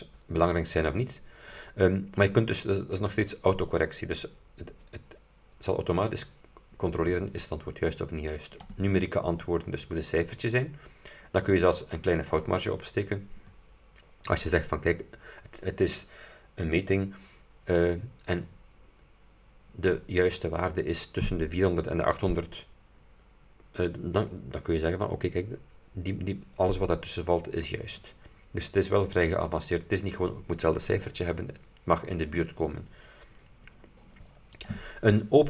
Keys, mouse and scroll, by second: 8.6 click, 34.7 click.